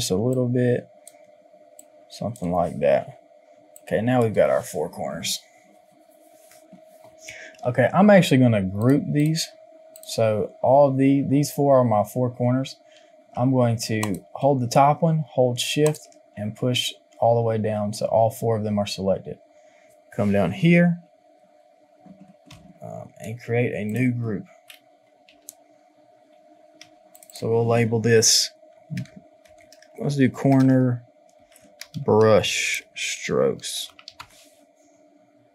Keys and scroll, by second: 2.9 Return, 33.7 typing.